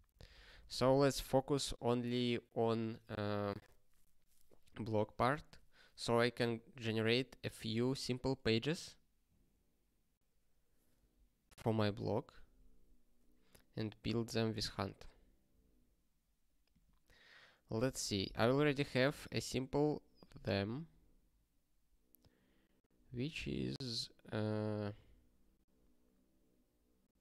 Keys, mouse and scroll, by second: 3.5 ctrl+space, 3.6 ctrl+a, 4.0 alt+;, 4.4 ctrl+s, 20.1 click, 22.7 click, 24.0 scroll up 1.